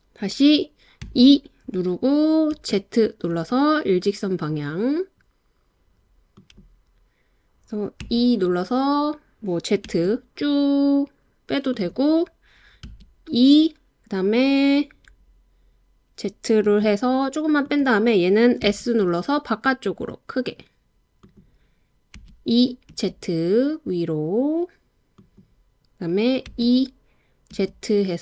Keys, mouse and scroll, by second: 1.0 e, 2.6 z, 6.4 click, 8.0 e, 9.9 z, 11.7 click, 12.9 e, 16.7 z, 17.6 click, 18.6 s, 21.2 click, 22.2 e, 22.9 z, 25.2 click, 26.5 e, 27.5 z.